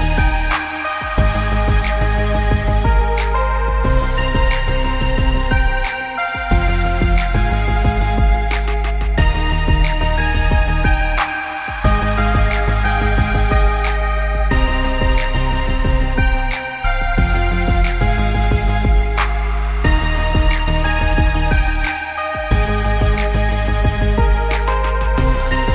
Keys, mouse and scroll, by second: 0.2-0.5 alt+scroll up 2, 0.7 space, 0.9 click, 4.7 Delete, 13.6-14.6 scroll down 1, 14.6-15.5 scroll up 1, 17.3 i, 17.8 click, 21.7 space, 21.9 click, 22.3 alt+scroll down 1, 23.8 right click.